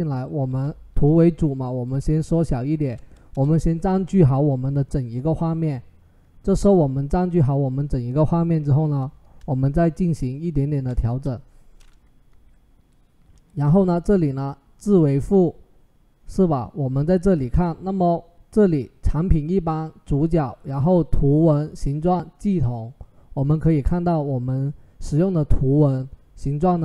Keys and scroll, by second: 0.3 ctrl+t, 3.1 Return, 8.5 ctrl+t, 10.8 Return, 12.1 Right.